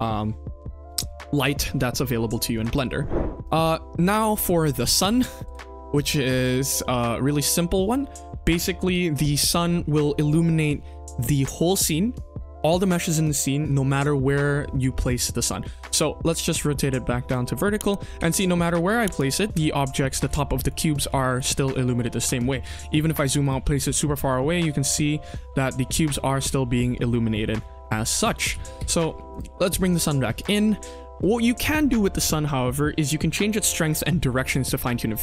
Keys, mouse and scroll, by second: 3.5 click, 4.1 middle drag, 4.9 click, 6.3 click, 6.6 KP_1, 6.9 click, 7.4-7.7 middle drag, 7.9-8.4 scroll up 2, 8.5 shift+middle drag, 14.8-15.5 scroll down 2, 15.5-15.8 scroll down 1, 15.5 KP_1, 15.8 r, 17.5 scroll up 1, 17.6 middle drag, 18.1 g, 19.8 g, 21.1 ctrl+z, 21.4 scroll down 2, 21.5 middle drag, 22.2 scroll up 2, 22.3-23.6 scroll down 3, 22.9 g, 23.6-24.9 scroll up 6, 24.4-24.9 middle drag, 24.9-25.2 scroll down 2, 25.3-25.6 shift+middle drag, 26.1 shift+middle click, 27.3-27.7 scroll up 3, 27.7-28.1 shift+middle drag, 28.5 ctrl+z, 28.7 ctrl+z, 29.2 click, 29.5-29.9 scroll down 2, 29.9 KP_1, 30.3 click.